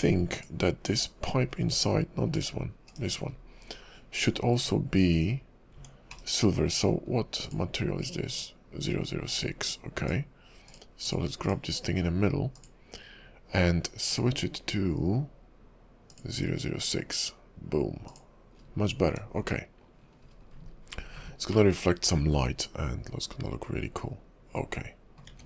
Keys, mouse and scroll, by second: 0.4 click, 1.0 /, 1.6 scroll up 2, 1.8 /, 2.4 click, 2.9 /, 3.4-4.5 scroll up 3, 4.5 Tab, 5.8 Tab, 6.1 /, 7.1-7.5 scroll down 3, 7.5 click, 9.3 click, 10.0 click, 10.7 click, 11.1 click, 11.5 click, 12.6 click, 14.1 click, 18.1 click, 18.7-20.2 scroll down 5, 20.2-20.8 scroll up 8, 20.7 KP_5, 21.7 middle click.